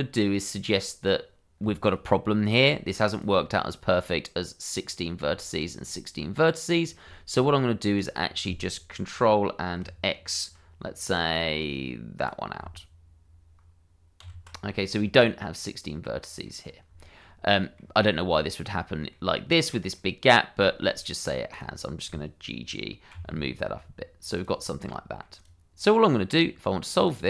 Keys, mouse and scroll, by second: 2.4 click, 3.1 ctrl+click, 4.8 click, 5.6 ctrl+click, 6.2 middle click, 7.1 shift+middle click, 7.9 click, 12.1 click, 14.2 ctrl+x, 14.6 middle click, 16.6 scroll up 1, 17.0 shift+middle click, 17.5 middle click, 21.0 middle click, 21.5 click, 21.8 middle click, 23.1 g, 24.3 click, 24.6 scroll down 1, 24.9 middle click, 25.3 click, 26.5-26.9 scroll up 1, 26.9 click.